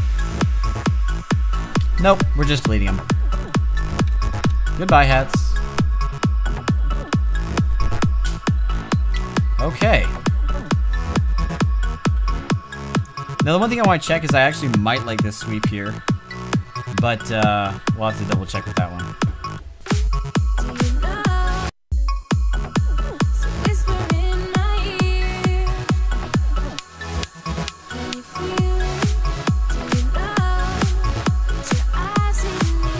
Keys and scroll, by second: 4.6 Delete, 15.7 ctrl+m.